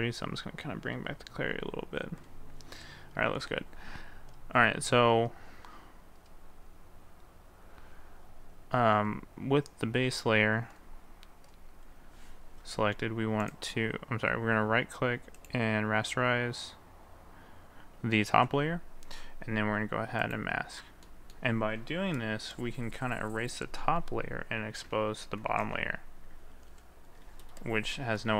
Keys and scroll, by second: 25.5 ctrl+z.